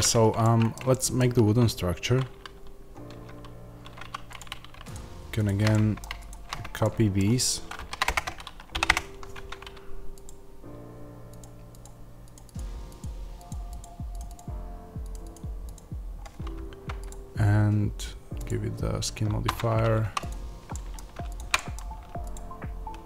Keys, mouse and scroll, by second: 0.8-3.0 shift+middle drag, 3.0 Tab, 3.9 2, 4.3 click, 5.6 middle click, 6.1 shift+click, 6.7-10.1 middle drag, 7.7 shift+d, 8.0 Return, 8.8 p, 8.8 Return, 9.2 Tab, 10.1 click, 19.3 Tab, 19.3-20.6 drag, 19.9 1, 20.6 middle click, 21.2 ctrl+click, 21.4 middle click, 22.2 ctrl+click.